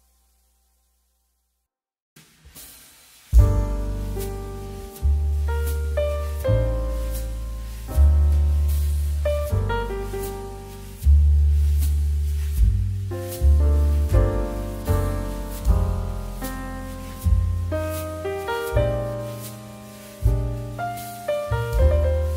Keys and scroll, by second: 14.2 2.